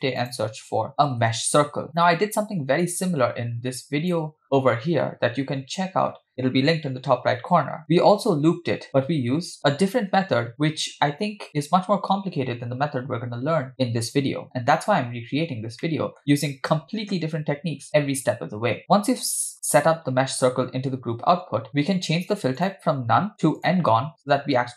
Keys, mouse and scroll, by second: 2.8-4.1 drag, 14.5-15.2 scroll up 1, 15.2 scroll up 3, 15.4-15.8 scroll down 2, 15.8 middle click, 18.8 middle click, 22.1-22.6 scroll up 2, 22.6-23.8 drag.